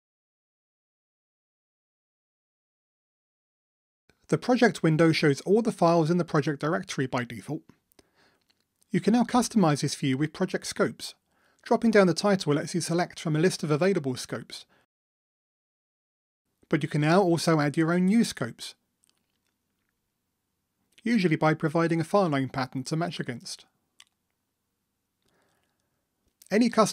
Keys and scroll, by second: 1.3 super+F9, 4.7 super+1.